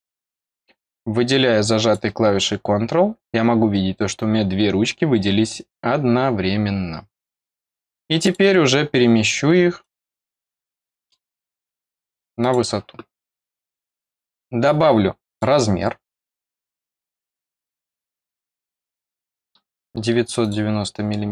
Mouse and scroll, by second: 0.0-0.4 scroll up 2, 0.8-1.9 drag, 8.2 click, 9.7 click, 10.2 scroll down 2, 10.6 middle click, 12.3 click, 15.2 click, 16.6 click, 18.2 click, 18.7 click, 20.3 click.